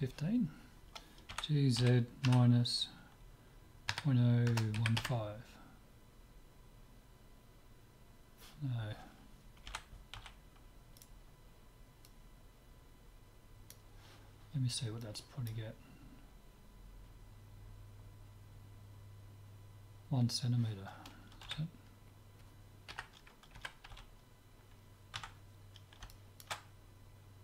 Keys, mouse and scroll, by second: 1.3 g, 12.1-13.9 drag, 15.0-16.8 drag, 21.5 z, 21.8-24.0 middle drag, 22.9 KP_3, 23.7 KP_1, 24.0 z, 25.2 Tab, 25.6-27.4 middle drag.